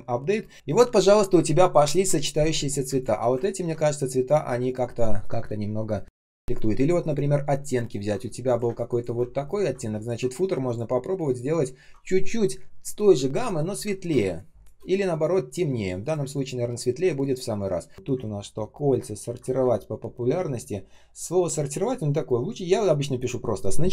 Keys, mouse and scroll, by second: 0.5 ctrl+shift+я, 2.8 space, 3.3 ctrl+scroll up 1, 7.9 ctrl+scroll down 1, 8.1 space, 8.6 space, 9.2 ctrl+scroll down 1, 9.4 ctrl+click, 9.9 ctrl+click, 13.8 ctrl+scroll down 1, 14.1 space, 14.7 space, 16.1 space, 16.6 space, 16.6 space, 18.2 ctrl+scroll up 1, 19.0 ctrl+scroll down 1, 21.5 ctrl+click.